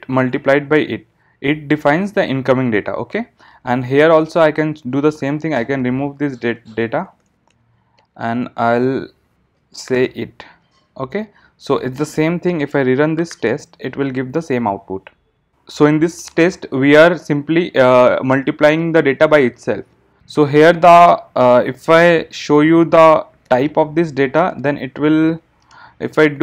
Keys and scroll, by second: 13.4 ctrl+shift+r, 25.7 alt+Return.